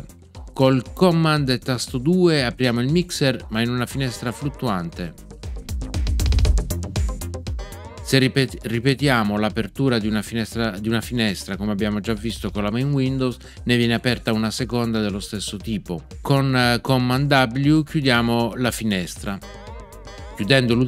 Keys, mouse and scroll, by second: 4.0 super+2, 7.5 super+2, 19.4 super+w.